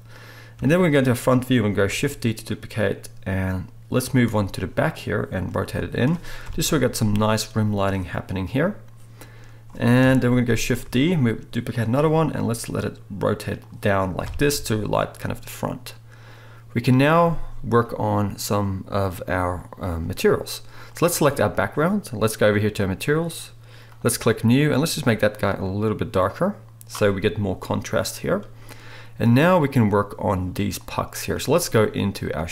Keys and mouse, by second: 0.5 KP_3, 1.8 shift+d, 4.2 r, 5.6 g, 6.4 KP_0, 6.6-9.4 right drag, 9.4-14.4 drag, 10.0 KP_3, 10.8 shift+d, 11.9 r, 14.2 KP_0, 14.4-20.8 right drag, 20.8 middle click, 21.0-23.9 right drag, 23.9 middle click, 24.6-26.9 right drag, 26.9 click, 27.4-30.7 right drag, 30.7 middle click, 30.8-32.5 drag.